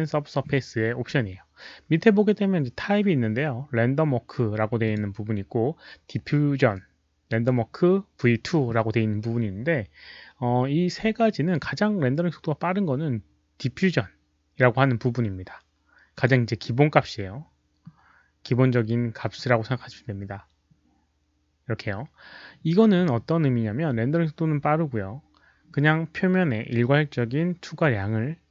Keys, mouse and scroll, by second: 1.1 Return, 1.1 click, 1.1 1, 4.8 Return, 4.8 click, 4.8 1, 16.1 click, 17.7 click, 23.1 click.